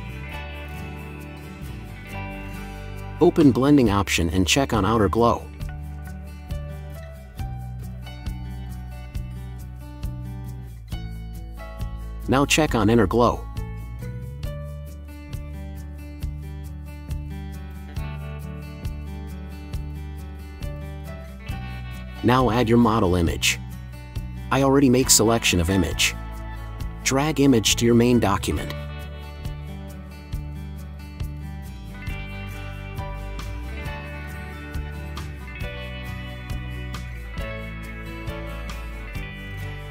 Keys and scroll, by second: 0.9 Return, 31.6 ctrl+y, 32.4 ctrl+t.